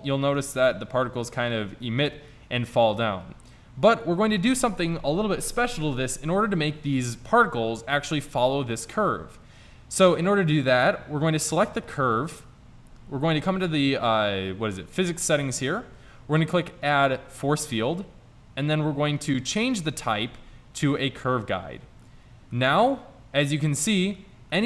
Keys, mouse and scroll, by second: 2.7 click, 7.1 middle click, 8.6 middle click, 11.6-13.6 drag, 13.6 right click, 15.0 right click, 16.7 click, 17.0 click, 18.5 click, 19.3 click, 22.3 middle click.